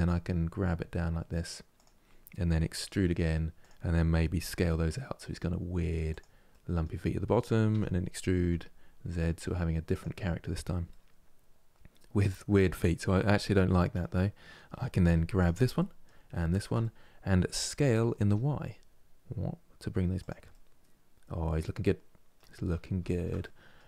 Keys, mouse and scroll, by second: 6.2-7.4 middle drag, 7.4 e, 10.6-14.7 middle drag, 14.7 3, 15.1 click, 15.5 middle click, 16.2 shift+click, 16.5-17.5 middle drag, 17.5 s, 20.2-23.8 middle drag.